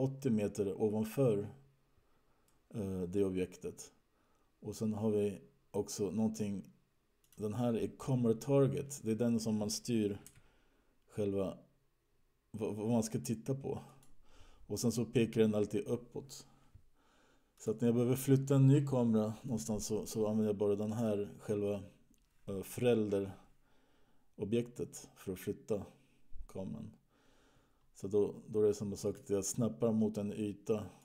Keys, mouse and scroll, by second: 2.5 middle click, 7.5 click, 10.9 g, 17.9 click, 19.9 middle click, 24.2-25.1 scroll up 3, 25.1-26.2 scroll down 6, 26.2-27.6 scroll down 5, 29.6 click.